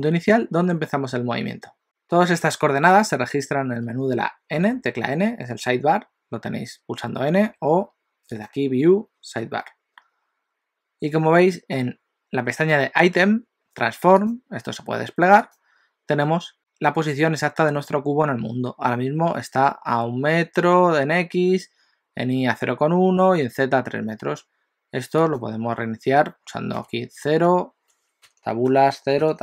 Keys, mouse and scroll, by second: 4.5 n, 7.1 n, 7.5 n, 8.4 click, 14.2 click, 15.4 click, 25.3 click.